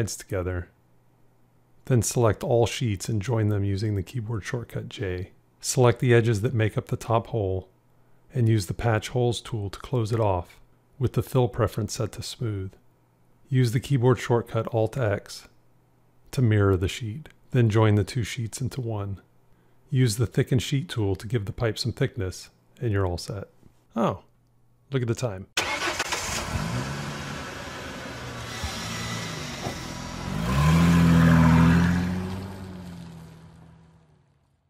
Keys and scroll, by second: 4.2 j, 15.5 alt+x, 18.2 j.